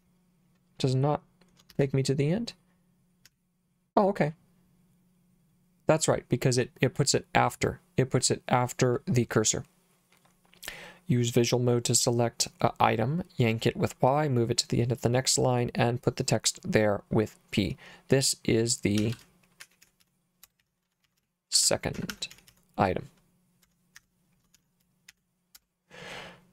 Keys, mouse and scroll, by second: 1.7 shift+4, 3.3 p, 19.0-25.1 typing, 24.0 Escape, 25.6 Return.